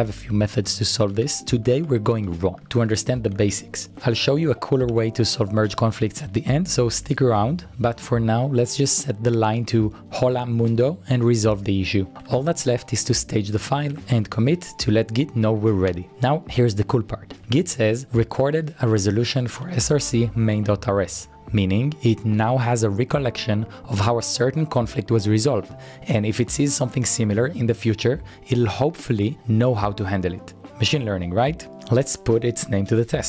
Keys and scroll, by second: 0.0-6.4 typing, 12.2-12.5 typing, 13.7-17.4 typing.